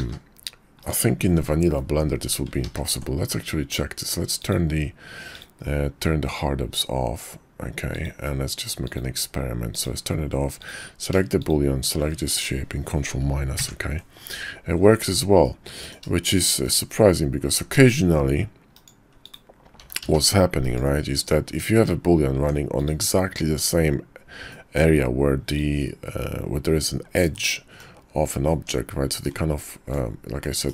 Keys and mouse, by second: 2.6 ctrl+z, 4.3-5.5 drag, 11.4 shift+click, 13.6 ctrl+KP_Subtract, 15.4-15.9 drag, 16.2 shift+drag, 16.7-17.1 drag, 17.5 s, 19.2 click, 19.8 s, 21.5 Tab, 22.4 Tab, 23.3 Tab, 24.5 click, 25.5 click, 27.3 click, 28.5 Tab, 29.2-30.0 drag, 30.4-30.7 middle drag.